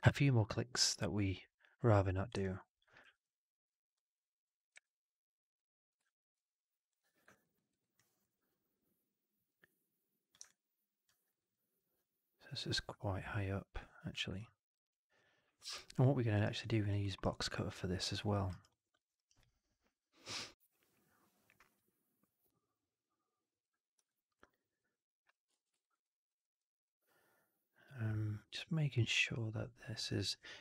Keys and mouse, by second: 2.3-2.7 alt+drag, 2.9 r, 3.1 middle click, 4.0 click, 5.5 w, 5.5 click, 5.9 alt+drag, 6.8 click, 7.2 click, 7.4 middle click, 7.6 alt+right click, 7.9 alt+drag, 9.4 click, 10.4-11.0 alt+drag, 11.2 alt+right click, 11.4 alt+middle drag, 12.4-14.0 drag, 14.3-16.2 alt+drag, 16.3 alt+right drag, 16.5-16.8 alt+drag, 16.9 alt+middle drag, 17.1 alt+right drag, 17.4-18.0 alt+drag, 18.2 alt+middle drag, 18.4 alt+right click, 18.6 alt+click, 18.9 alt+middle click, 19.1 alt+right click, 19.3-23.5 alt+drag, 24.0 alt+click, 24.7 click, 25.4 ctrl+z, 25.7 right drag, 25.9 alt+drag, 26.3 alt+middle drag, 26.7 alt+click, 30.5 Delete.